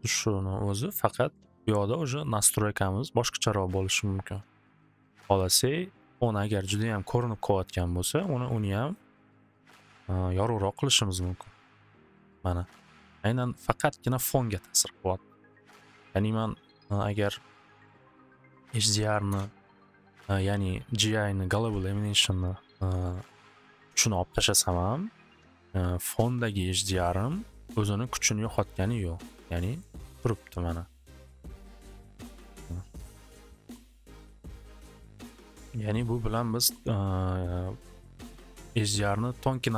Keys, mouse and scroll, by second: 5.6-7.6 drag, 8.6 click, 8.7 click, 8.9-9.7 typing, 8.9 click, 9.1 click, 14.8-16.5 middle drag, 17.3 click, 18.7 click, 18.7-19.6 typing, 18.8 click, 23.3 typing, 25.5-27.0 middle drag, 28.6 middle click, 29.8 middle click, 32.2 click, 32.7 click, 34.2 click, 35.8 click, 36.0 click, 37.0 click.